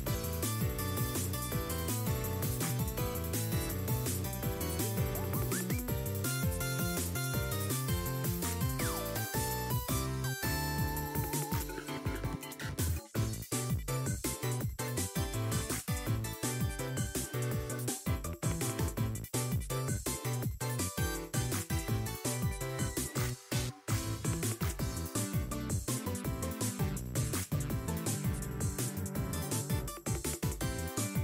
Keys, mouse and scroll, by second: 8.3-8.9 scroll up 6, 8.5-8.8 shift+middle drag, 9.1 r, 9.7 scroll up 2, 9.8 middle click, 10.6 r, 18.9-20.0 drag, 20.4 middle click, 20.8 shift+middle click, 21.7 r, 23.7-24.0 scroll down 3, 24.0 shift+middle click, 25.2 r, 26.4-27.2 scroll down 2, 27.2-29.1 drag, 29.2 scroll down 4, 29.4-29.8 shift+middle drag, 30.0-30.3 scroll down 3, 30.3 middle click, 31.0 scroll down 1, 31.1 middle click.